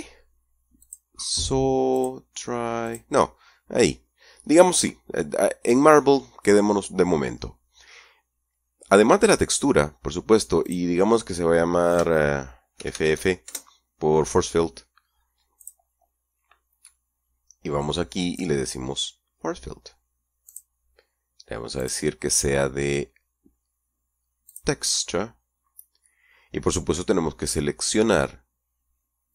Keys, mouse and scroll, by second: 1.0 click, 2.2 click, 3.1 click, 10.9 click, 13.0 shift+f, 13.7 shift+KP_Enter, 15.8 click, 20.7 click, 22.0 click, 24.7 click.